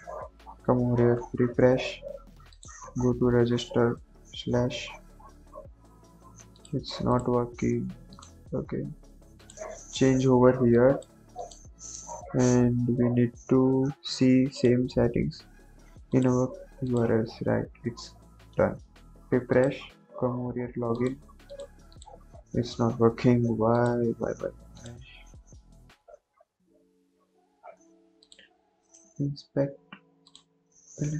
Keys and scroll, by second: 4.0 ctrl+s, 17.1 ctrl+s.